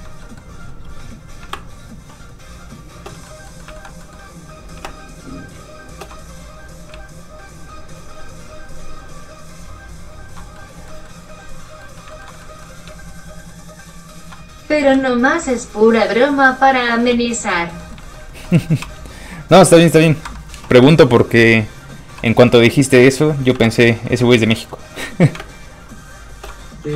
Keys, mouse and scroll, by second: 0.3 middle click, 0.4 middle click, 0.9 f, 1.6 shift+space, 3.3 middle click, 3.4 middle click, 3.7 alt+shift+middle click, 4.9 shift+space, 6.3-6.9 scroll up 2, 7.1 ctrl+shift+click, 10.6 shift+middle click, 10.7 middle click, 12.1 shift+middle click, 13.3 ctrl+shift+click, 14.6 shift+scroll up 1, 14.8 ctrl+middle click, 15.0 ctrl+z, 15.7 ctrl+shift+click, 17.6 shift+middle click, 17.7 middle click, 18.1 shift+middle click, 18.8 shift+q, 20.3 Escape, 20.8 w, 22.5 middle click, 22.7-23.2 scroll down 1, 23.6 alt+m, 23.8 middle click, 24.4 shift+middle click, 24.6 middle click, 24.7 middle click, 24.9 f, 25.1 click, 25.4 shift+space, 26.4 shift+click, 26.9 shift+f.